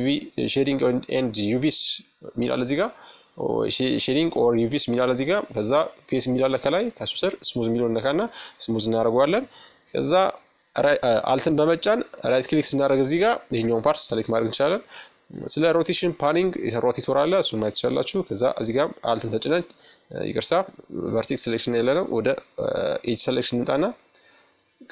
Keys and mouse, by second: 5.0-6.8 drag, 6.1 Tab, 6.8 Tab, 9.5-11.3 right drag, 12.2-14.1 middle drag, 14.6-16.3 middle drag, 16.5-19.2 right drag, 19.2-22.6 drag, 21.8-23.6 middle drag, 23.7-24.9 drag.